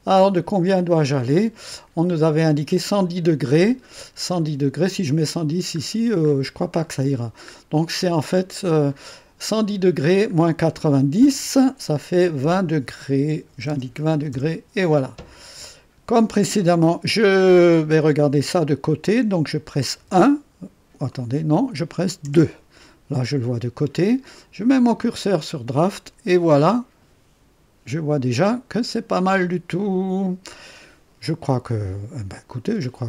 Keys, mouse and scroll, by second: 0.6 scroll up 2, 1.7 scroll down 2, 4.3 click, 5.6-6.0 scroll up 2, 6.2 scroll up 2, 6.7 scroll up 2, 7.4 scroll up 1, 8.1-8.9 scroll down 2, 9.8-10.1 scroll down 1, 13.4 KP_2, 13.6 KP_0, 14.3 KP_Enter, 19.9 KP_1, 21.1 scroll up 1, 21.3 right click, 31.6-33.0 drag.